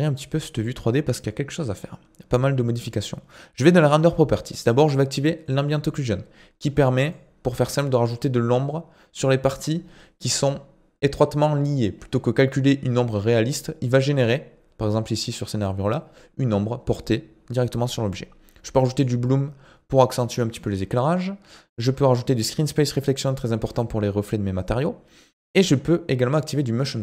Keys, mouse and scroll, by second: 3.6 click, 5.5 click, 7.1 click, 14.2 click, 19.1 click, 22.7 click, 26.8 click.